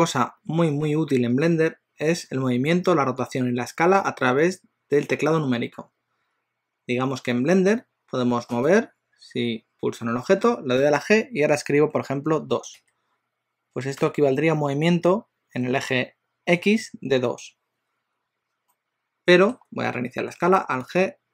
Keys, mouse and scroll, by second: 8.7 click, 10.8 g, 18.8 middle click, 20.9 alt+g.